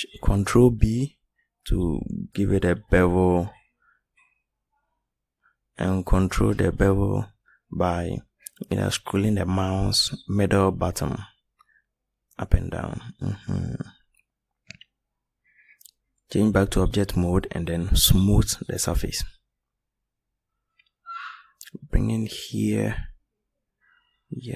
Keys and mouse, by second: 23.6 middle drag, 24.3 middle click.